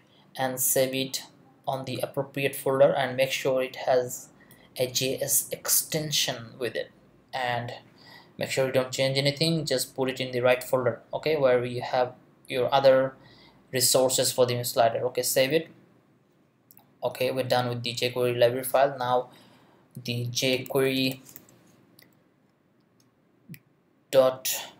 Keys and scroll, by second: 20.3-21.9 typing, 24.6 Down.